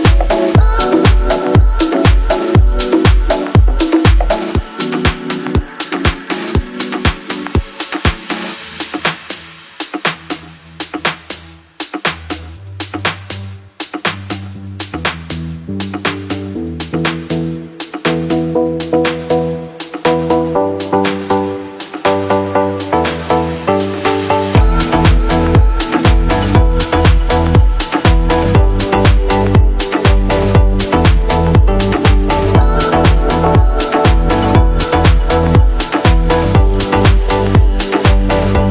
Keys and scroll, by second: 9.3-14.5 typing, 18.2 ctrl+l, 25.6-27.2 typing, 27.2 Return, 28.4 1, 28.7 ,, 28.8 Return, 35.2-36.8 typing, 38.5-38.7 typing.